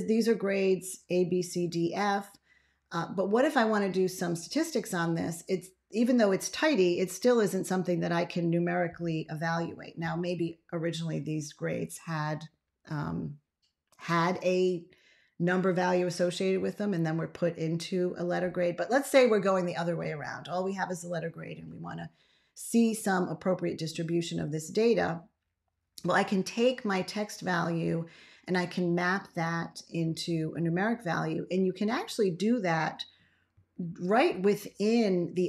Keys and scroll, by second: 33.4 ctrl+a.